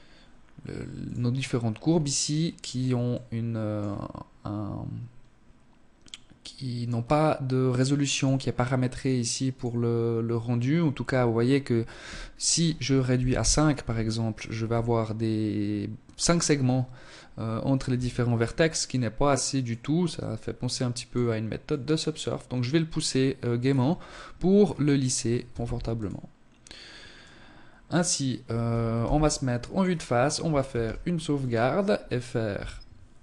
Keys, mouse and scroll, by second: 0.7 scroll up 2, 1.5-2.0 scroll up 3, 2.0 middle click, 7.0 click, 8.4 click, 13.2-13.5 scroll down 1, 13.5 Tab, 16.8 Tab, 17.3-17.7 scroll up 3, 18.5 click, 20.6 click, 22.5-23.0 scroll down 6, 23.5 scroll down 1, 23.6 scroll up 2, 24.9 ctrl+s, 26.8 scroll down 1, 27.8 KP_0, 28.7-29.3 scroll down 1, 29.6 ctrl+s.